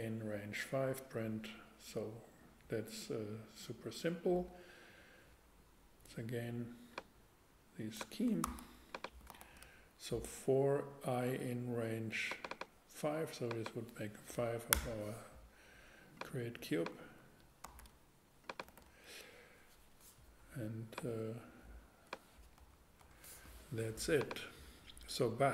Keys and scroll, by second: 8.4 super+c, 9.3 super+v, 14.7 Return, 17.6 alt+super+c, 18.2 super+c, 18.7 super+v, 22.6 BackSpace.